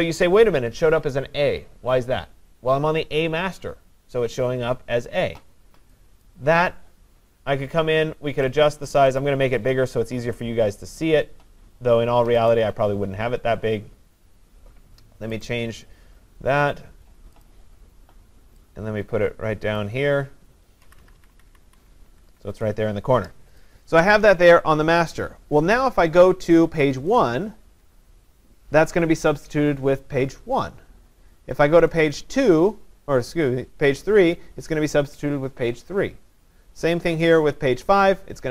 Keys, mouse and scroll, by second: 6.3 click, 8.6 click, 8.8 click, 9.2 click, 11.0 click, 12.5 click, 15.4 click, 17.4 click, 19.8 click, 21.2 Up, 21.7 Up, 22.1 Down, 22.3 Down, 22.6 Down, 23.6 click, 25.7 scroll, 27.1 click, 27.3 click, 31.9 click, 32.2 click, 37.2 click, 37.4 click.